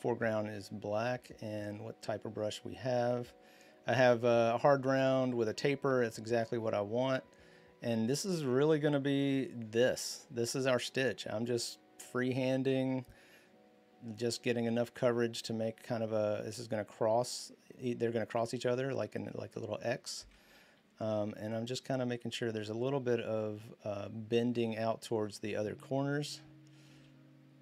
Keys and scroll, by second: 6.4-7.7 typing, 20.5-22.1 typing, 23.6-26.3 typing.